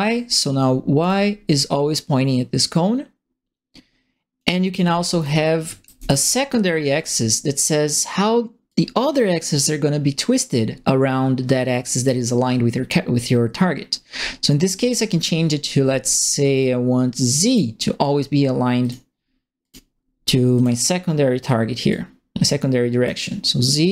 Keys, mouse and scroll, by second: 1.0 click, 1.9-4.3 drag, 4.5-6.5 typing, 4.7-6.2 right drag, 6.9 click, 8.6-12.0 drag, 17.4 click, 18.8 click, 19.6 click, 20.5 click, 21.8-23.0 drag, 23.8 click.